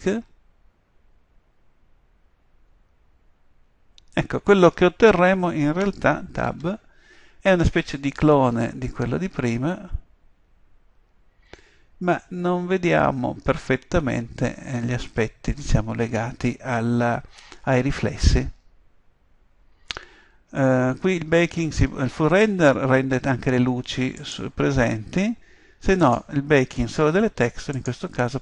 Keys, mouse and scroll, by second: 6.5 Tab.